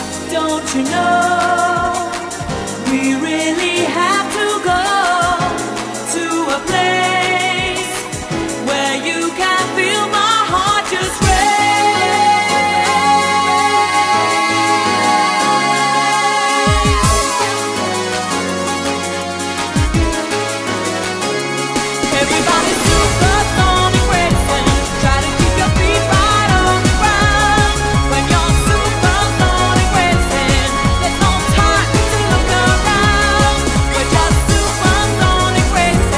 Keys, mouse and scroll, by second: 1.9 click, 17.1 click, 19.4-20.2 scroll up 3, 21.7 shift+middle click, 29.7 right click, 33.1 scroll down 1, 33.7-34.4 scroll up 1, 34.4 shift+right click.